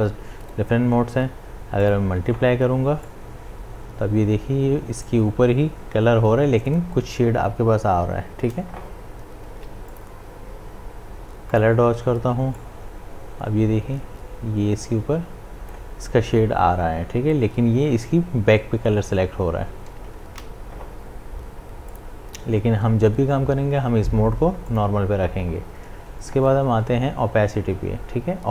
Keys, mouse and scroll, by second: 1.8-7.5 drag, 9.4 click, 9.5 ctrl+z, 9.9-18.2 drag, 20.1 click, 20.3 ctrl+z, 21.9 click, 26.8 click.